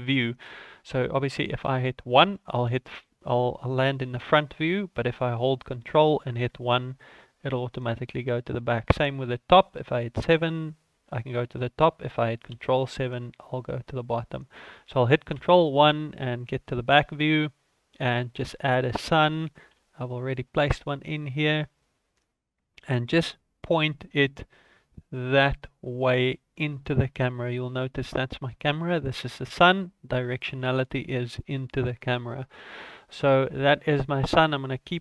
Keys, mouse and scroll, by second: 1.5 KP_1, 6.3 ctrl+KP_1, 9.8 KP_7, 12.4 ctrl+KP_7, 15.2 ctrl+KP_1, 16.6 scroll up 2, 17.4 right click, 18.6 shift+middle click, 19.6 KP_7, 20.5-21.3 scroll up 7, 21.3-22.1 scroll down 7, 22.1-22.5 scroll up 2, 22.6 shift+middle click, 27.4 right click, 28.6 right click, 32.8 scroll down 3, 33.1 middle click.